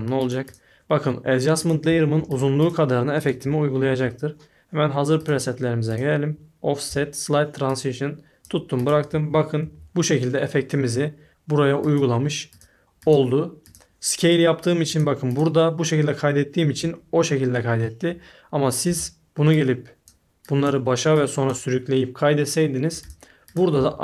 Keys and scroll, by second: 2.1 shift+5, 3.4 shift+7, 9.7 shift+5, 18.8 s, 23.7 a.